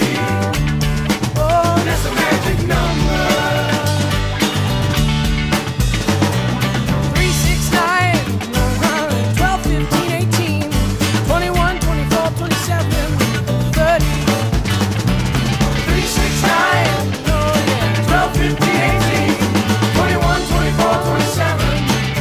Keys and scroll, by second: 7.1 shift+super+i, 9.9 shift+super+=, 10.5 shift+super+-, 13.4 shift+super+t, 21.8 shift+super+o.